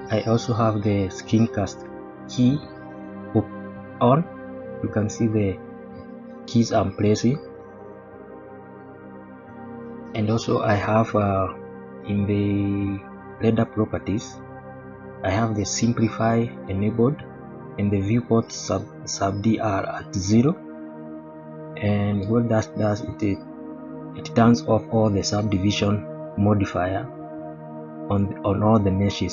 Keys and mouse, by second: 6.2 n, 7.0 n, 8.7-9.2 middle drag, 9.5-9.8 shift+middle drag, 11.6 shift+middle drag, 13.2 click, 16.6 click, 22.2 click, 23.5-23.8 shift+middle drag.